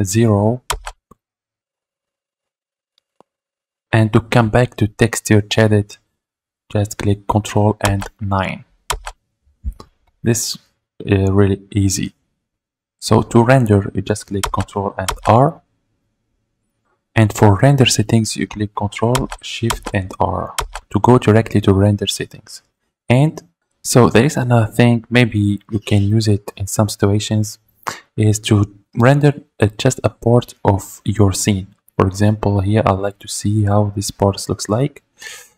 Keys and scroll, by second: 0.7 ctrl+0, 8.9 ctrl+9, 15.0 ctrl+r.